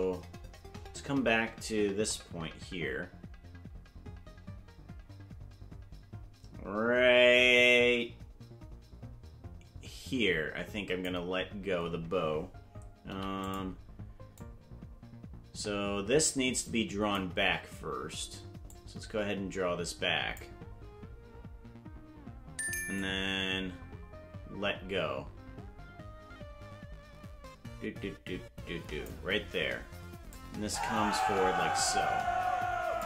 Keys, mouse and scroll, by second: 13.1 i, 14.4-17.2 drag, 18.7-20.4 drag, 23.0-29.1 drag, 30.3-33.0 drag.